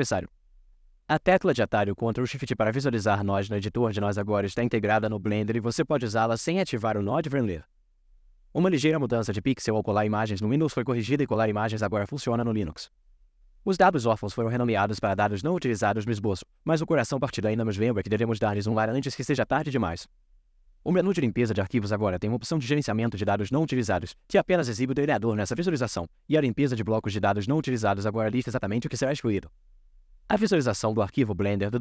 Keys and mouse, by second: 2.6 ctrl+shift+click, 5.0 middle click, 7.6 middle click.